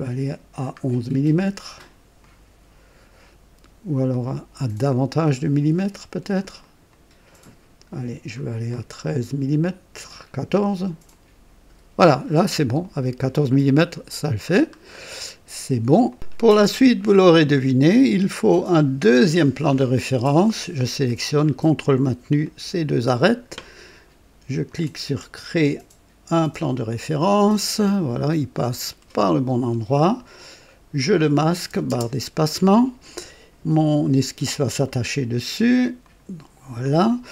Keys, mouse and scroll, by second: 0.2 scroll down 1, 1.3 click, 2.2 click, 4.1-5.8 drag, 6.6 click, 8.6-9.2 scroll up 2, 11.0 click, 12.1-14.6 drag, 14.6-15.0 scroll down 1, 15.2 right click, 16.7-18.1 drag, 19.1 click, 21.6 ctrl+click, 22.4-23.6 ctrl+drag, 24.6 click, 26.7 click, 27.8-30.2 drag, 30.9 click, 31.8 space, 36.0 click.